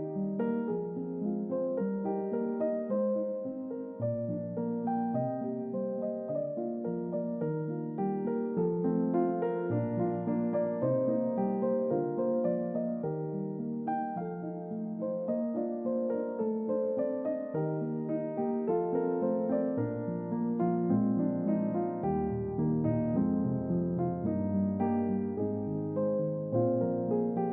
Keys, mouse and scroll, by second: 1.3 click, 2.9 click, 3.6 shift+middle drag, 4.8 alt+z, 5.5 middle click, 5.5-6.1 scroll up 3, 5.8 middle click, 6.5 click, 7.5 Tab, 8.9 click, 9.9 click, 11.5 click, 12.3 middle click, 12.3 scroll up 2, 13.0-14.2 middle drag, 13.0 scroll up 2, 13.1-13.9 scroll down 2, 13.9 scroll up 2, 15.2 g, 16.0-16.5 scroll up 3, 16.4 middle click, 16.5-18.1 scroll down 3, 16.8-18.1 middle drag, 18.1 middle click, 18.1-19.6 scroll down 5, 18.5 middle click, 19.3 middle click, 23.3 y.